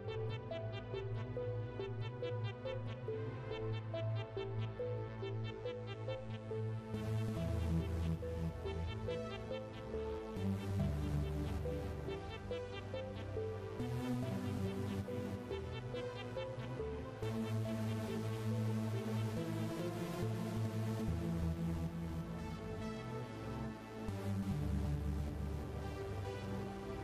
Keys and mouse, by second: 0.8 click, 2.4 KP_7, 4.0 click, 5.5 click, 6.6 KP_1, 7.4 KP_0, 8.3 click, 10.0 click, 11.2 click, 13.7 click, 16.3 click, 17.2 click, 18.7 click, 20.3 x, 21.4 click.